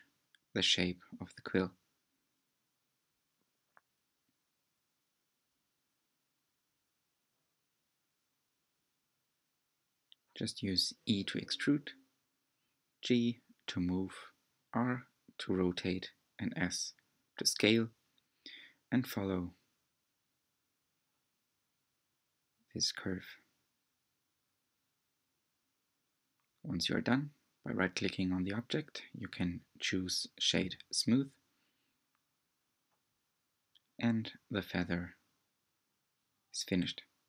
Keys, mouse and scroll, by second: 0.4 e, 2.2 s, 3.2 scroll down 1, 3.4 shift+middle click, 4.0-20.6 typing, 4.1 click, 5.1 shift+middle click, 5.4 shift+middle click, 6.0 shift+middle click, 6.8 shift+middle click, 7.4 shift+middle click, 8.2 shift+middle click, 9.0 shift+middle click, 9.7 shift+middle click, 10.1 shift+middle click, 10.6 shift+middle click, 11.3 shift+middle click, 12.2 shift+middle click, 13.0 shift+middle click, 13.7 shift+middle click, 14.4 shift+middle click, 15.1 shift+middle click, 15.7 shift+middle click, 16.2 shift+middle click, 16.8 shift+middle click, 18.1 shift+middle click, 18.9 scroll up 2, 19.0 shift+middle click, 20.0 scroll up 3, 21.0-22.0 scroll down 16, 22.4 Tab, 23.0-25.1 shift+middle drag, 25.1-26.7 right drag, 26.7 middle click, 27.5 click, 27.8-28.2 scroll down 2, 28.2-30.2 middle drag, 30.2-30.6 drag, 31.7 shift+click, 34.7 ctrl+a.